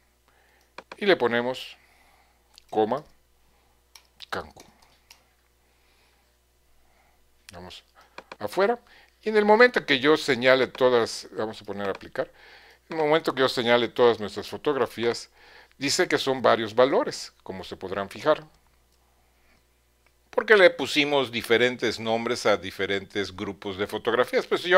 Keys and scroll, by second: 2.9-5.8 typing.